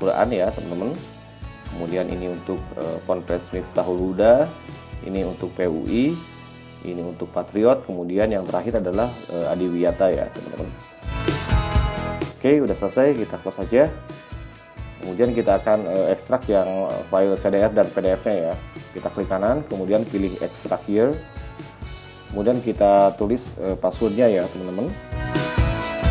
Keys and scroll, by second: 17.1 z.